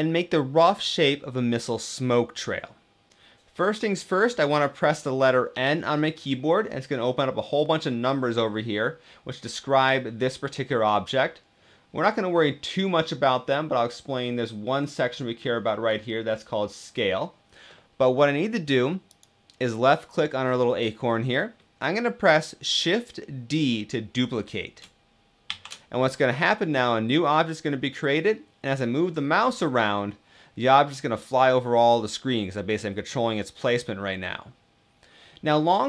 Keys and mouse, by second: 5.2 n, 25.2 shift+d.